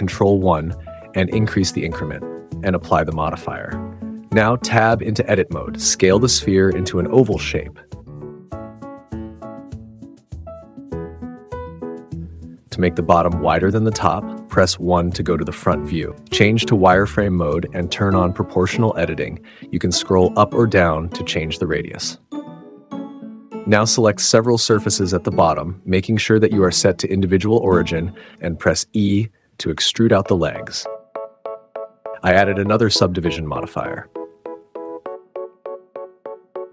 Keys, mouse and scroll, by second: 1.6 click, 4.9 1, 5.5 Tab, 6.0 a, 7.0-9.1 typing, 7.7 click, 8.3 click, 11.3 s, 11.3 z, 12.1 1, 18.3 s, 18.5 x, 21.6 Tab, 22.4 middle click, 22.4 Tab, 22.8 click, 26.1 shift+click, 27.9 super+z, 28.2-28.6 drag, 28.8 e, 29.6 click, 29.8 s, 30.5 super+z, 30.8 click, 31.1 s, 33.1-35.8 drag, 35.8 s, 36.1 Tab, 36.3 click, 36.4 super+z.